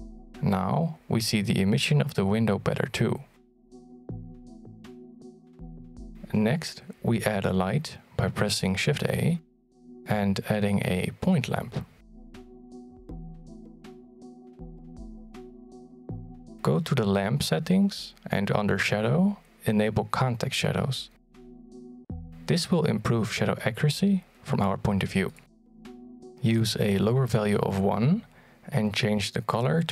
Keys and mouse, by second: 0.5 click, 4.6 click, 6.3 middle click, 7.2 shift+a, 13.5 middle click, 14.4 shift+middle click, 15.1-15.5 middle drag, 15.7 g, 23.1 click, 24.7 click, 26.3 click.